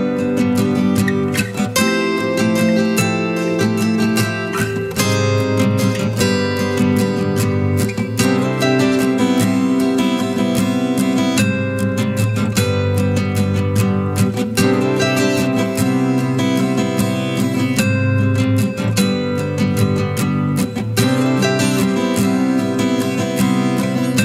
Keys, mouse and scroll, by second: 2.2 ctrl+t, 3.3 alt+shift+click, 12.9 alt+shift+click, 17.2 Return, 21.6 ctrl+-, 22.7 ctrl+t, 23.9 alt+shift+click.